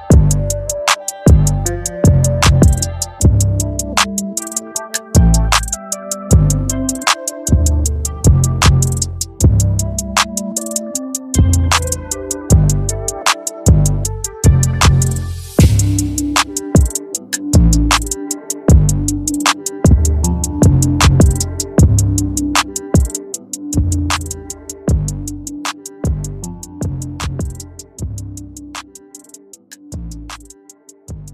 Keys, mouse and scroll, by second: 5.2 click, 5.3 z, 10.4 z, 11.2-16.3 drag, 19.4 z, 20.2-22.3 drag, 22.4 z, 22.7-27.4 drag, 29.5 click, 30.5 click.